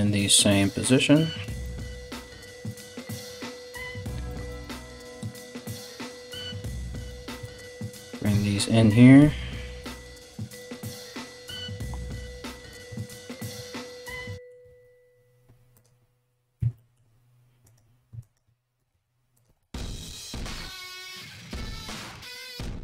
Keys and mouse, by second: 0.4 right click, 0.5 middle click, 1.0 right click, 1.1-2.6 middle drag, 1.5 g, 2.6 right click, 2.7-5.0 middle drag, 5.0 ctrl+right click, 5.1-12.3 ctrl+middle drag, 5.7 g, 7.6 right click, 8.2 right click, 8.8 g, 9.9 right click, 11.5 3, 12.3 right click, 12.4 ctrl+middle click, 12.8 right click, 13.0 ctrl+middle click, 13.4 ctrl+right click, 13.7-16.2 ctrl+middle drag, 14.3 alt+s, 16.2 1, 17.2 right click, 17.8 ctrl+right click, 18.4 g, 19.0 g, 19.7 g, 21.0-22.8 alt+middle drag, 21.2 alt+right click, 21.8 g, 22.5 g.